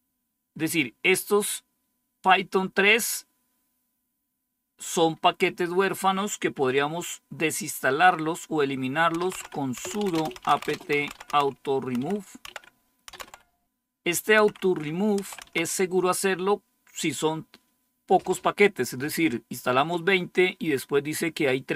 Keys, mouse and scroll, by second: 8.8-15.8 typing.